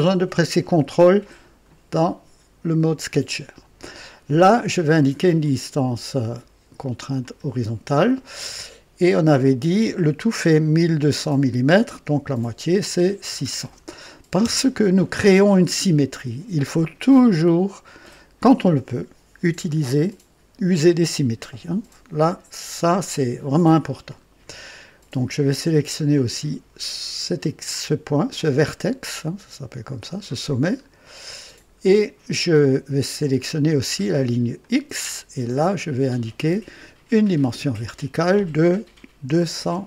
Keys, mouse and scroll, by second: 7.2 click, 12.7 KP_6, 13.2 KP_0, 14.3 Return, 23.0 scroll up 1, 27.6 scroll up 1, 30.0 click, 30.8-31.7 scroll down 4, 34.5 click, 37.1 click, 39.2 KP_2, 39.5 KP_0.